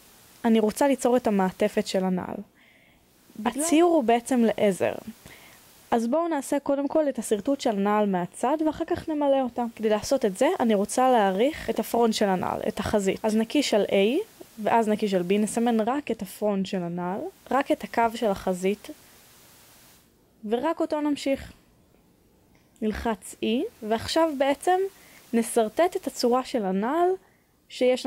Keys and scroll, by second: 11.7 3, 14.5 e, 27.2 e.